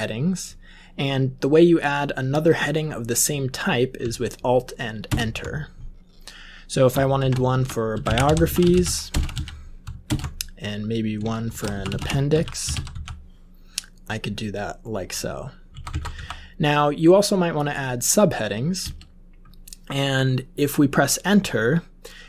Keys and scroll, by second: 5.0 alt+Return, 6.9-9.8 typing, 10.0 alt+Return, 11.1-13.4 typing, 15.7 Up, 15.8 Up, 16.1 End, 18.8 Return.